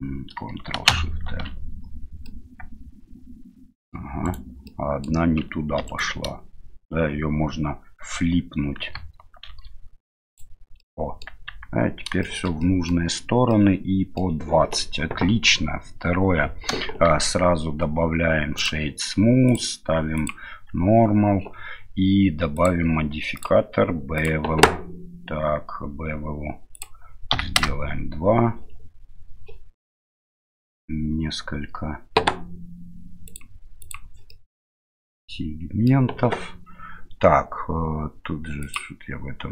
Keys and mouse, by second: 0.9 ctrl+shift+n, 2.3-3.9 middle drag, 4.2 right click, 4.7 middle click, 5.8 3, 9.5 alt+n, 10.8 middle click, 11.5 Tab, 12.2 shift+middle drag, 12.6 middle drag, 13.5 middle click, 17.1 q, 20.2 click, 20.7 q, 22.6 drag, 23.4-24.3 drag, 26.7-28.3 drag, 27.6 KP_Decimal, 33.4 click, 33.8 click, 34.3-35.9 middle drag, 38.6 click.